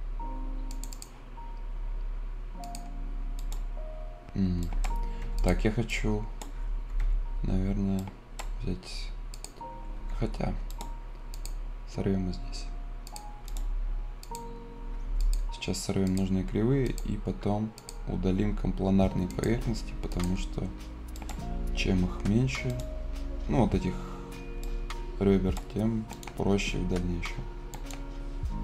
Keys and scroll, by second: 4.9 Escape, 6.7 Escape, 10.0 Escape, 15.0 Escape.